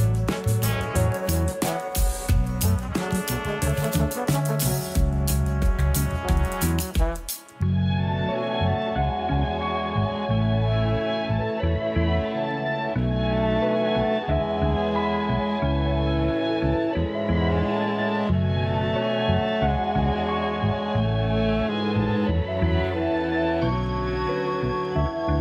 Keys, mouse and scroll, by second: 0.2 scroll up 1, 0.6 Tab, 1.2 scroll down 2, 1.5 Tab, 2.6 ctrl+3, 3.1-4.2 scroll up 1, 4.2-6.0 right drag, 6.0 Tab, 6.2 Tab, 6.7 Tab, 7.2 a, 7.5 a, 8.4 middle click, 9.1 scroll up 4, 9.5-11.5 shift+middle drag, 11.5 3, 12.4 a, 12.6 a, 13.0 ctrl+r, 17.7 scroll down 4, 17.9 a, 18.2 a, 18.4 Tab, 19.0-20.6 middle drag, 20.6-21.3 scroll up 5, 21.3 Tab, 22.5 a, 22.7 a, 23.5 ctrl+r, 25.1 a, 25.2 a.